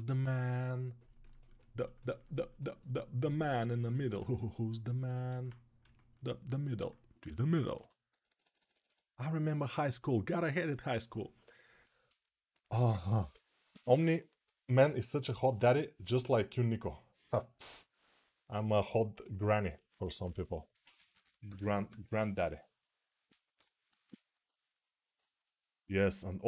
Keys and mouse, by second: 1.5-4.0 ctrl+alt+shift+right drag, 5.1 alt+q, 7.5-8.6 typing.